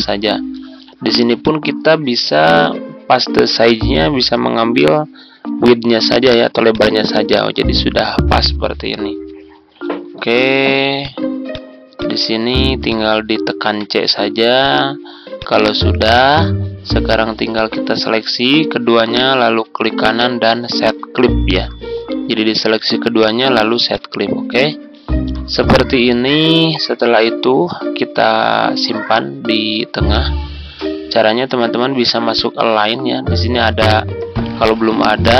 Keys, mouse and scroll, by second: 9.9-10.3 ctrl+scroll down 1, 10.9 click, 12.8 shift+click, 13.8 shift+c, 14.5 click, 17.5 shift+click, 19.1 right click, 23.8-35.3 drag.